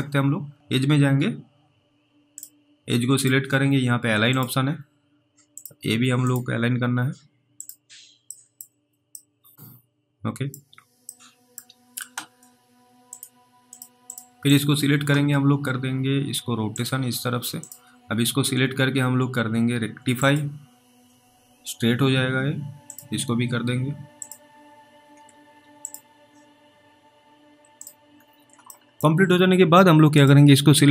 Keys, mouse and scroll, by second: 0.5-1.1 scroll up 1, 2.3 click, 9.4 middle click, 9.4-10.1 scroll down 1, 10.6-11.0 scroll down 1, 11.4 middle click, 13.1 click, 14.5 double click, 16.8 click, 25.8 click, 27.2-27.7 scroll down 1, 27.8 click, 28.1-28.8 scroll down 3, 29.0 middle click, 30.2 click.